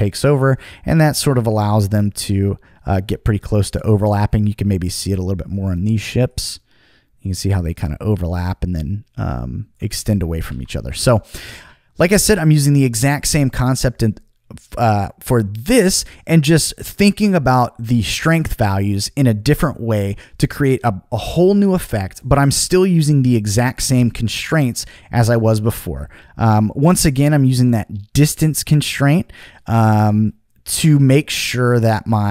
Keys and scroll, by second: 10.1 super+z, 10.5 super+z.